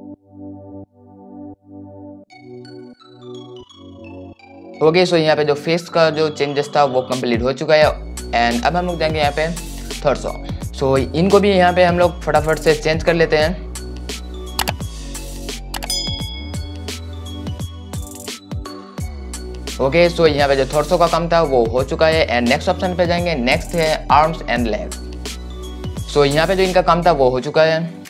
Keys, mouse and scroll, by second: 10.7-17.0 drag, 19.0 right click, 25.3 right click.